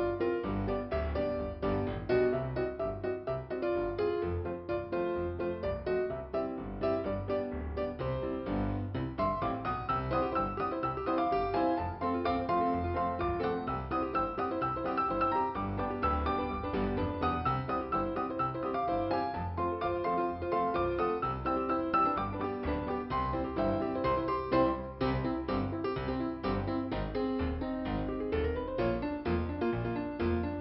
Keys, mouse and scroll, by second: 0.1-1.2 scroll down 2, 1.2-1.8 scroll up 2, 6.3 click, 12.1 click, 12.8 middle click, 14.3 middle click, 16.8 click, 17.9 right click, 21.5 scroll down 1, 23.3 scroll up 2, 25.6 scroll down 1, 26.9 middle click, 29.5 middle click.